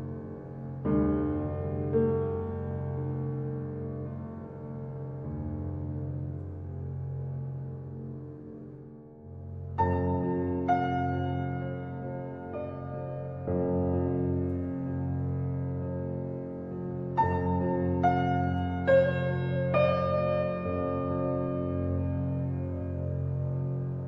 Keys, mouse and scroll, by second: 2.6 middle click, 3.1-3.6 scroll up 3, 3.6-6.0 shift+middle drag, 6.0 ctrl+z, 7.4 click, 7.8-8.3 scroll up 2, 8.3-9.4 shift+middle drag, 9.4 click, 10.4 shift+click, 10.9 middle click, 11.5-11.8 scroll down 1, 11.8-13.3 middle drag, 13.3 shift+click, 14.3 shift+click, 15.1 x, 17.6-18.9 scroll down 3, 18.9 click, 19.7 middle click, 20.5 shift+click, 21.5 i.